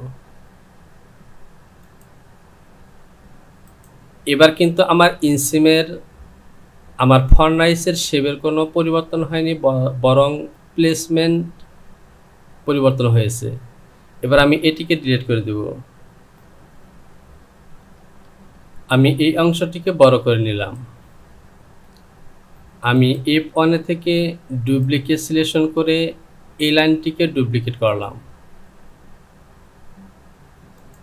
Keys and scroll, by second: 16.2 Delete, 18.3 Return.